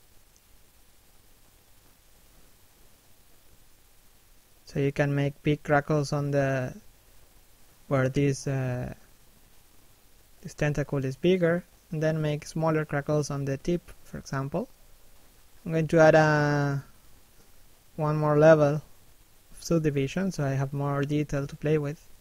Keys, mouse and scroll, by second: 2.6 middle click, 4.3 shift+middle click, 4.5 middle click, 5.1 click, 7.7 middle click, 9.4-9.8 scroll up 1, 9.8 middle click, 16.0 shift+middle click, 16.5 middle click, 17.6 middle click, 18.1-18.8 scroll up 1, 19.7 p, 20.5 middle click, 21.0 scroll up 1, 21.3 click.